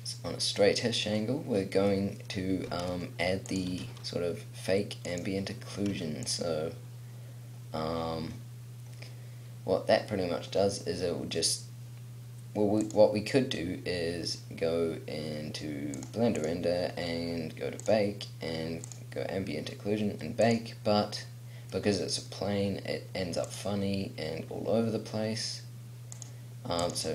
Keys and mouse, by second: 0.7 middle click, 1.7 middle click, 2.8 s, 3.8 g, 5.9 g, 9.0-13.0 middle drag, 21.8 middle click.